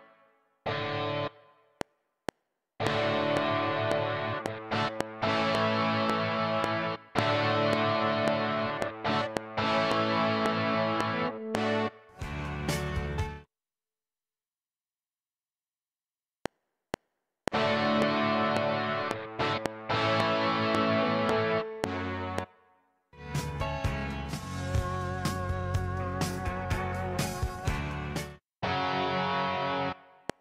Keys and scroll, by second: 1.6 F7, 11.8 space, 16.3 F7, 22.4 space, 24.2 ctrl+shift+Left, 28.1 space, 30.1 F7.